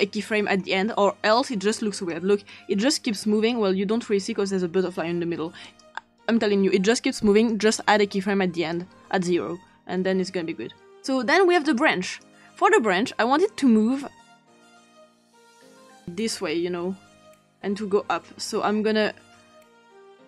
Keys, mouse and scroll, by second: 2.0-3.8 drag, 5.6 click, 7.0-7.5 drag, 8.6 click, 10.9-11.9 drag, 12.0 click, 14.3 click, 14.6 click, 15.2 click, 15.9-19.8 drag.